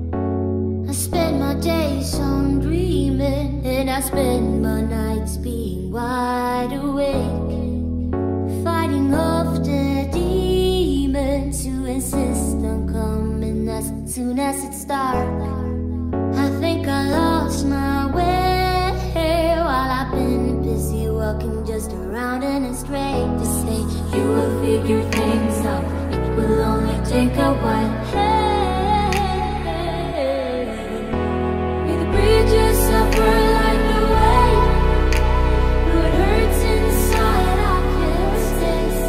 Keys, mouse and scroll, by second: 2.7 middle click, 3.1 middle click, 3.7 middle click, 4.6 click, 4.8 middle click, 5.1 click, 5.6-7.2 middle drag, 7.7 middle click, 9.4-10.2 middle drag, 11.3 click, 16.3-33.0 middle drag, 34.1 middle click, 34.9 shift+a.